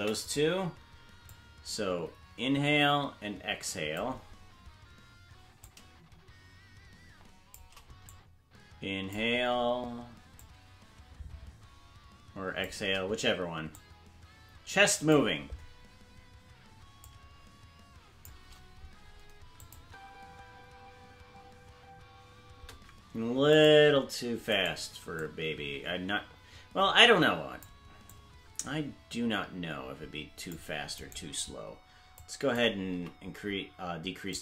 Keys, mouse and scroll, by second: 1.2-4.0 drag, 5.5-7.5 drag, 8.0-9.1 drag, 10.4-12.7 drag, 13.8-15.1 drag, 17.0-18.3 drag, 19.6 click, 19.8 space, 23.5-24.6 right drag, 23.5 space, 24.9 c, 32.2 click, 33.0 s.